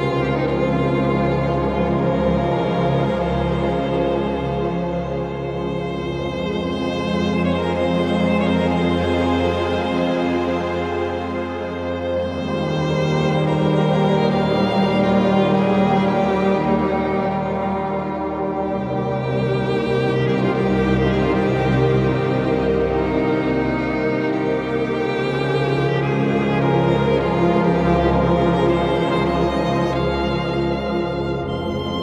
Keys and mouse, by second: 0.6 click, 1.6 click, 2.7 click, 3.5 click, 6.2 click, 7.2 click, 8.1 click, 9.4 click, 10.2 click, 11.2 click, 11.7 click, 12.7 click, 13.5 click, 14.1 click, 15.1 click, 16.2 click, 19.0 click, 20.6 click, 22.3 click, 24.3 click, 25.9 click, 28.5 click, 29.4 click, 30.8 click.